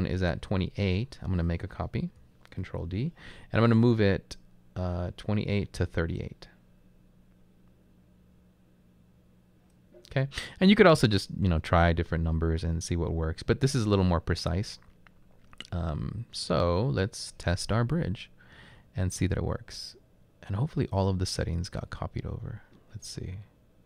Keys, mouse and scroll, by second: 2.6 ctrl+d, 2.7 typing.